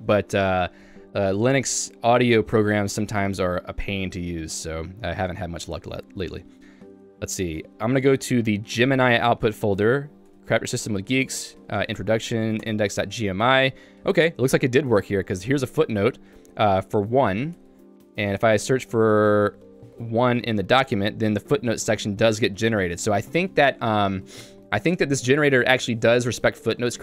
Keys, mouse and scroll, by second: 12.7 Return, 13.8 j, 15.6 shift+v, 17.5-19.9 typing, 20.4 Return, 21.2 k, 22.2 j, 22.8 k.